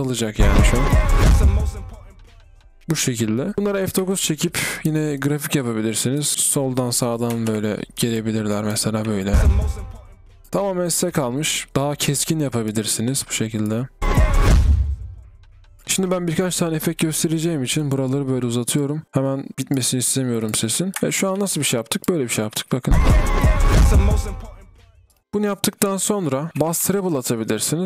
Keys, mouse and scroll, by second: 0.7 b, 5.5 double click, 6.3 typing, 7.5-8.3 typing, 9.7 typing, 15.0 typing, 15.8 ctrl+z, 22.4 ctrl+click, 23.2 typing, 26.5 ctrl+b, 27.7 typing.